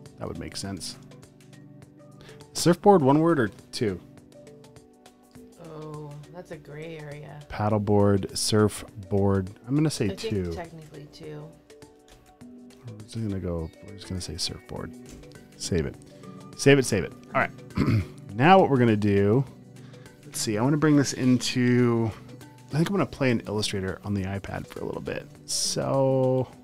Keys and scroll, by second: 0.5-2.2 typing, 6.5 BackSpace, 8.7-12.8 typing, 15.2 Return, 18.6 space.